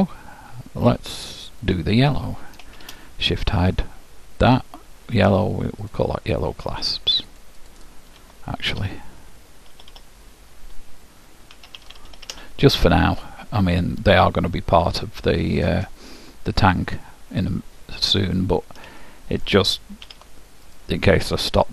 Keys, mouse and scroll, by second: 0.0-1.7 middle drag, 1.7-3.3 drag, 2.9 shift+h, 3.9-5.6 middle drag, 6.0-9.7 drag, 9.9 Delete, 18.1-19.1 scroll up 1, 19.1-21.1 middle drag, 20.1 ctrl+w, 21.1 scroll down 1, 21.1-21.7 middle drag.